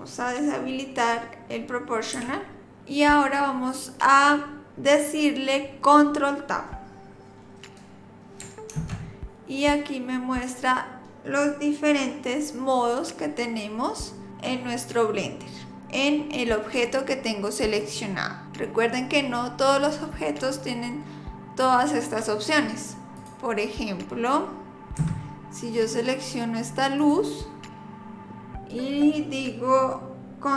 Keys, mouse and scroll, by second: 2.2 o, 8.7 ctrl+Tab, 27.0 click.